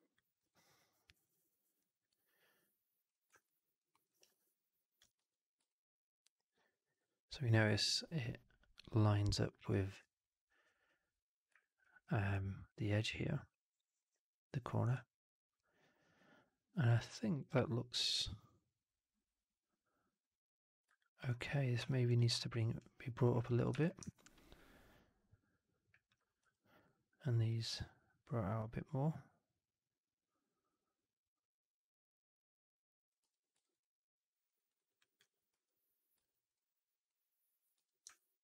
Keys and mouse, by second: 3.3 alt+click, 3.8 alt+middle drag, 4.0 alt+right click, 4.2-4.9 alt+drag, 5.1 w, 5.6-6.8 drag, 11.7 alt+middle drag, 12.2-13.9 alt+drag, 14.8 alt+click, 18.0-20.7 drag, 20.9 alt+click, 21.7 3, 23.1 click, 23.6 4, 24.0-26.0 alt+drag, 26.3 3, 26.7 click, 28.2-33.0 drag, 33.1 4, 33.5 alt+right click, 33.7 alt+click, 34.5 alt+right click, 34.7 alt+click, 34.9 alt+click, 35.4 3, 36.1 alt+click, 36.4 click, 37.0 click, 37.7 4, 38.0-38.4 alt+drag.